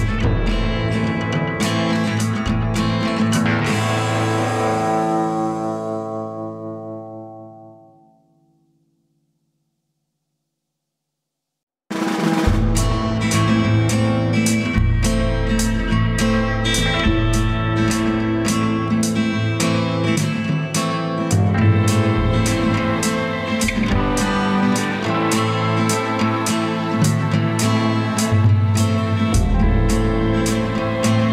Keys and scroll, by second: 10.6 ctrl+=, 26.2 ctrl+a.